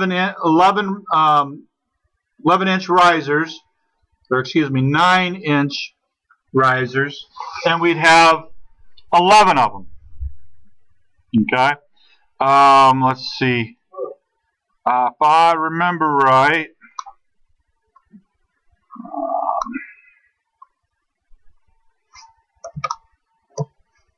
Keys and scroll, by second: 17.3 9.